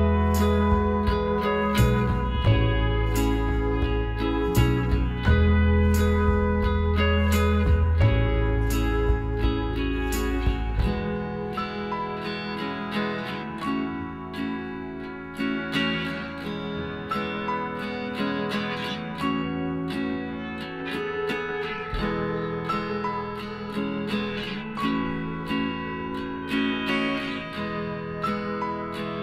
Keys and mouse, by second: 0.8 b, 1.5 b, 2.3 b, 3.4-5.4 drag, 6.2 Tab, 6.4-10.7 right drag, 7.8 Tab, 9.9 b, 10.8 b, 12.1-13.9 drag, 14.4-16.2 right drag, 15.2 b, 16.2 b, 17.7 a, 19.6 Tab, 20.2-25.1 middle drag, 21.3 a, 22.8 z, 25.6-27.7 middle drag.